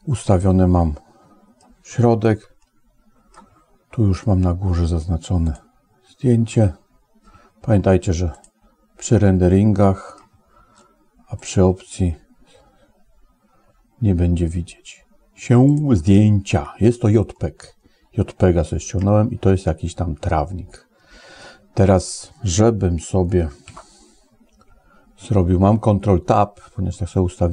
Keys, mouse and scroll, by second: 0.3-1.4 middle drag, 2.4 shift+middle click, 8.2 click, 9.3 middle click, 11.2 click, 15.5 click, 17.2-18.8 middle drag, 20.2-21.3 middle drag, 23.5 ctrl+Tab.